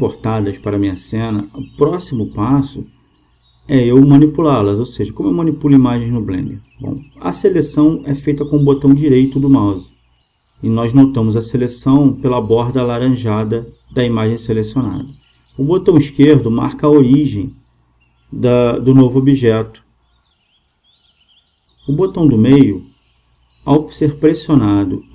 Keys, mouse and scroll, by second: 5.9-15.3 right drag, 14.8-25.1 drag, 24.9-25.1 middle drag.